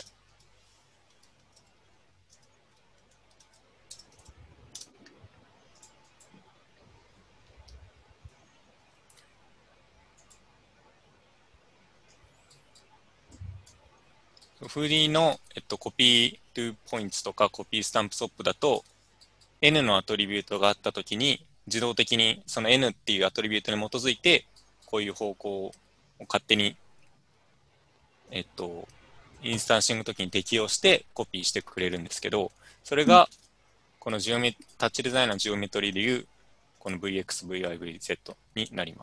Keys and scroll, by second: 0.1-4.5 typing, 3.5 Tab, 4.8 Return, 33.3 alt+Tab.